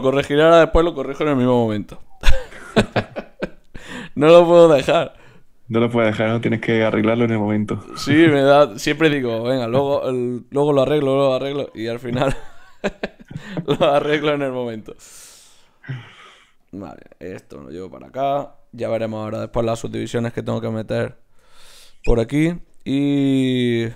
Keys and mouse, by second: 1.4 g, 2.8 shift+Tab, 3.5-7.7 typing, 4.2 click, 5.2 click, 6.0-9.3 drag, 8.5-11.5 right drag, 10.0-12.2 drag, 10.3 g, 13.8 click, 14.7 right click, 14.9 click, 14.9-17.7 typing, 15.4 right click, 23.0 ctrl+Tab, 23.8-23.9 drag.